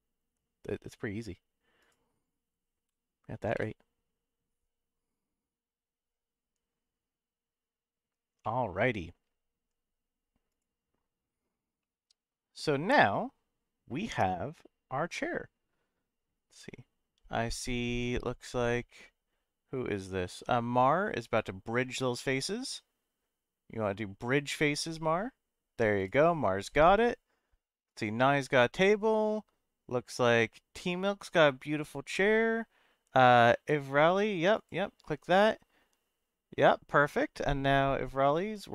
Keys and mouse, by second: 8.4 middle click, 11.8-15.3 middle drag.